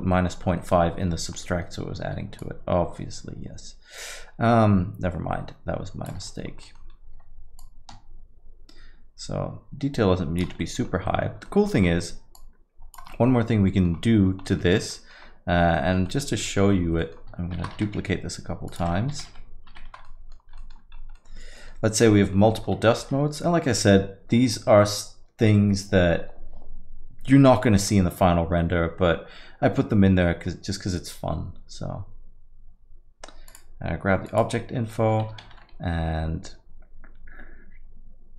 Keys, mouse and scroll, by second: 0.1 middle click, 0.6 middle click, 0.9-1.5 scroll up 2, 1.4 middle click, 2.4 shift+click, 6.3 middle click, 6.6 middle click, 6.6 scroll down 1, 6.9 scroll up 3, 7.6 click, 10.6 middle click, 10.8-11.9 scroll down 7, 11.0 middle click, 11.4 middle click, 11.9 middle click, 12.4 click, 13.1 middle click, 13.1 scroll up 1, 13.3 scroll down 2, 13.7 middle click, 13.9 scroll down 1, 14.5 middle click, 14.5 scroll down 4, 14.8 scroll up 1, 15.0 middle click, 15.2 scroll down 1, 15.8 alt+middle click, 16.1 middle click, 16.3 scroll down 1, 16.5 alt+middle click, 16.8-17.1 scroll up 2, 17.0 middle click, 17.8 shift+d, 19.4 shift+r, 19.6 shift+r, 19.9 shift+r, 20.1 middle click, 20.4 scroll down 1, 20.6 alt+middle click, 21.0 scroll up 1, 21.2 middle click, 22.4 scroll up 3, 22.5 middle click, 23.0 shift+a, 34.8 scroll up 3, 34.9 middle click, 35.4 shift+a.